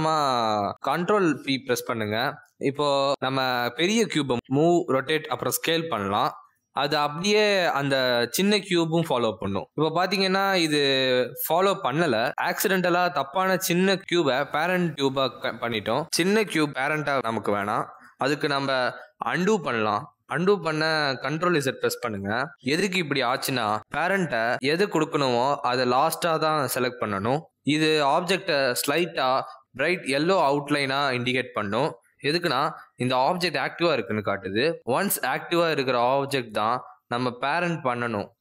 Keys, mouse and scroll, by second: 0.4 ctrl+p, 7.0 click, 9.3 r, 10.8 g, 11.9 s, 13.3 r, 14.0 g, 16.3 click, 17.0 r, 18.8 g, 19.6 s, 21.3 r, 23.1 ctrl+z, 23.8 ctrl+z, 24.3 ctrl+z, 28.5 click, 31.1 click, 32.0 shift+click, 33.5 click, 34.0 click, 34.4 shift+click.